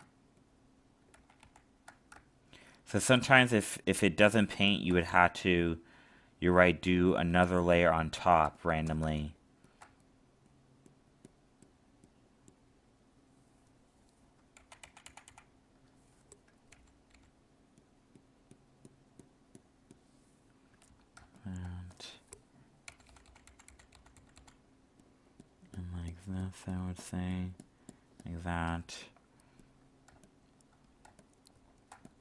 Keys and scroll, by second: 1.1 ctrl+z, 7.4 alt+space, 14.5 ctrl+z, 21.1 alt+space, 30.1 alt+space.